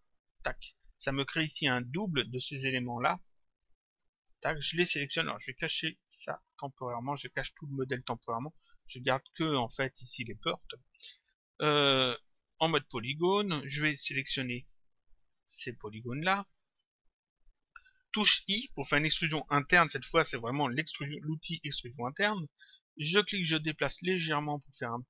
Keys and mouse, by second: 0.4 click, 4.1 click, 6.3 click, 8.7 click, 12.8 click, 14.6 click, 16.6 shift+click, 23.0 click.